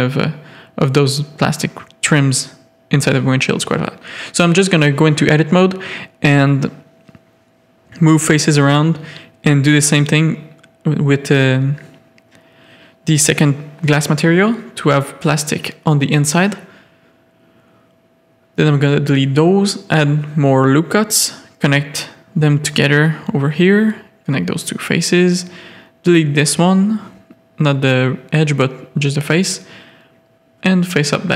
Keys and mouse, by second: 0.6 a, 2.6 alt+shift+click, 3.3 g, 4.6 a, 5.4 z, 6.4 z, 6.9 3, 7.0 click, 10.9 1, 11.5 z, 14.1 middle click, 14.7 a, 14.8 middle click, 16.5 2, 17.4 click, 17.5 x, 18.4 1, 18.6 a, 19.0 ctrl+r, 19.7 a, 20.2 click, 22.0 shift+click, 22.7-25.9 typing, 23.6 click, 25.6 click, 27.0 ctrl+z, 27.4 x, 28.1 1, 28.7 a, 29.1 ctrl+r, 29.8-31.3 typing, 30.2 click, 30.9 Tab.